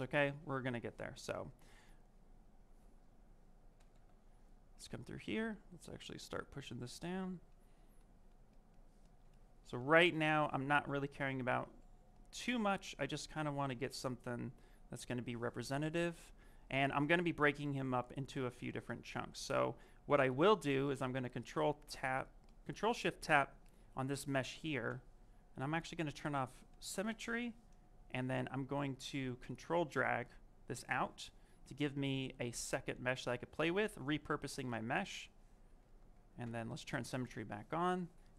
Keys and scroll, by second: 3.6 b, 15.0 ctrl+z, 20.2 w.